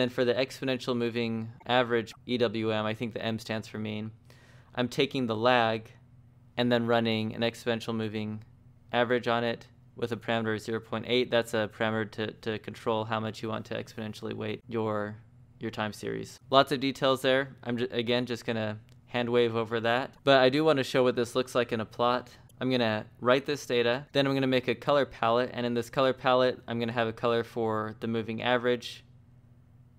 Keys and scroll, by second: 4.1-5.4 typing, 24.9 shift+v, 26.7-29.9 typing.